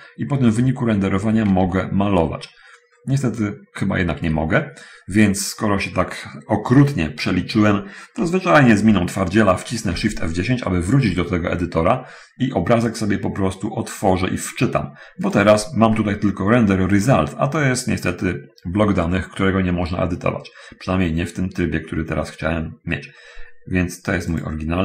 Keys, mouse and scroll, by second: 1.9 t, 3.2 scroll up 1, 4.2 middle click, 4.5 Escape, 10.2 shift+F10, 13.2 click.